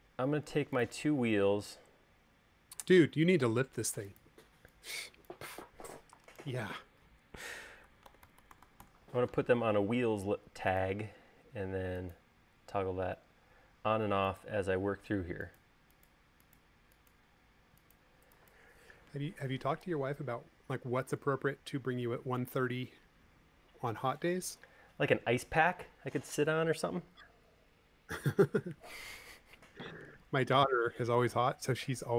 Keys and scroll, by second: 7.7-8.9 typing.